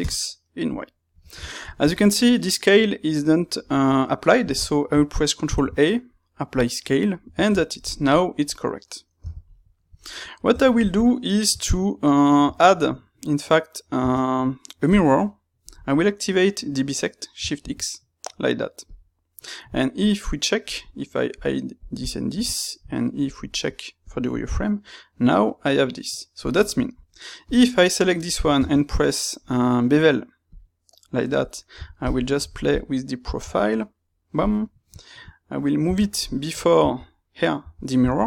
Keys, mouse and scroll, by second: 0.0 KP_Enter, 0.9-9.1 middle drag, 6.6 ctrl+a, 9.1 n, 9.6 shift+middle click, 10.6 Tab, 14.8 space, 18.8 click, 21.2-24.4 drag, 24.4 middle click, 26.9 Tab, 27.4 click, 27.8 middle click, 30.5 space.